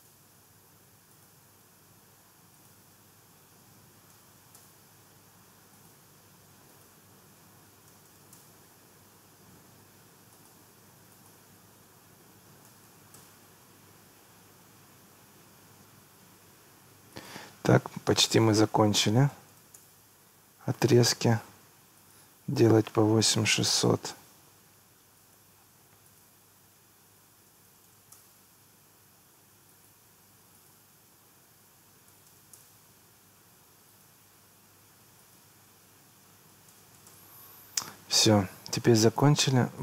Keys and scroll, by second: 0.0 Return, 3.4 8, 4.6 Return, 7.4 8, 8.4 Return, 12.2 8, 13.2 Return, 18.8 8, 19.8 Return, 22.7 8, 23.8 Return, 27.2 8, 28.2 Return, 31.7 8, 32.6 Return, 36.3 8, 37.1 Return, 38.1 Escape.